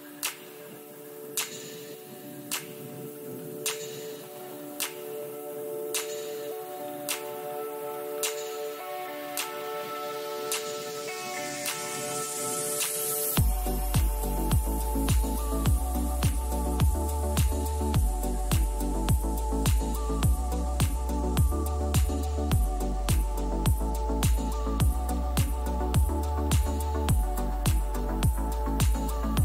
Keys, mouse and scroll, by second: 1.0-3.4 middle drag, 1.4 a, 1.7 a, 3.4 ctrl+r, 5.5-8.5 middle drag, 9.9-16.0 middle drag, 18.2-21.1 middle drag, 19.0 a, 19.4 a, 25.2 KP_3, 28.1 ctrl+r.